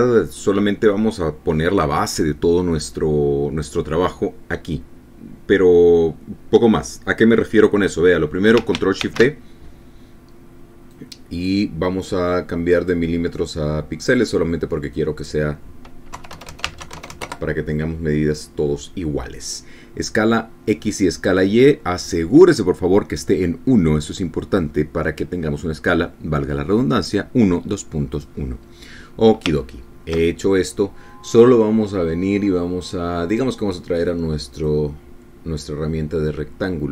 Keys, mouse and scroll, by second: 10.0 ctrl+shift+d, 11.9 click, 13.8 click, 15.1 click, 16.0 click, 17.2 KP_3, 17.3 KP_0, 17.7 Tab, 17.8 KP_3, 17.9 KP_0, 18.2 KP_Enter, 29.2 click, 30.6-30.9 ctrl+scroll up 2, 31.3 ctrl+click, 34.3 click, 35.7-36.9 drag.